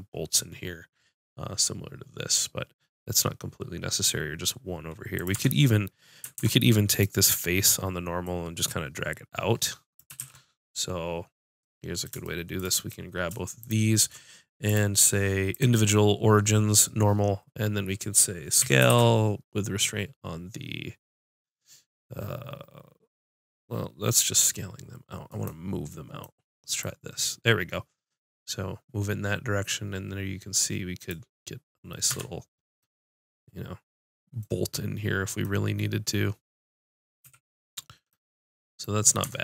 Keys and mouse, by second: 5.1 click, 5.3 Tab, 6.3 ctrl+Tab, 7.3-8.8 drag, 10.2 ctrl+z, 13.6-18.6 drag, 18.6 s, 25.4-29.7 drag, 32.1 Tab, 32.4 click, 37.2 a, 39.2 Tab.